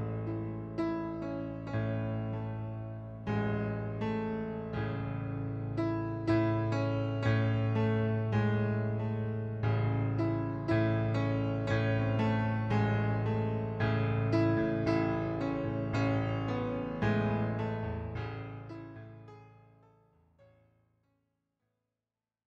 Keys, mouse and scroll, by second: 0.0 click, 2.0 right click, 3.7 middle click, 4.3 click, 5.2 click, 6.6 middle click, 8.0 shift+click, 8.3 middle click, 9.6 click, 10.6 click, 11.5 click, 12.3 click, 14.7 click, 17.8 right click, 18.7 click, 20.4 middle click.